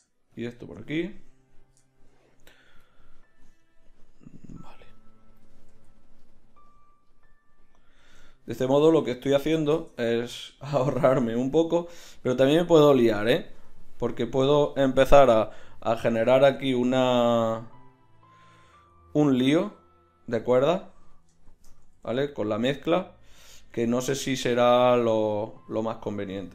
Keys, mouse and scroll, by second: 5.8 z, 8.0 Tab, 8.6 a, 9.0 a, 9.4 z, 16.2 r, 20.7-25.0 middle drag, 21.8 r.